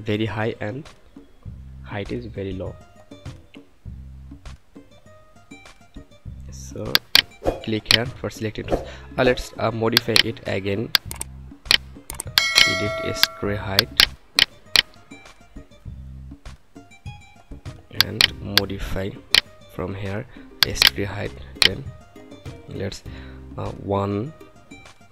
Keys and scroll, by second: 23.7 1.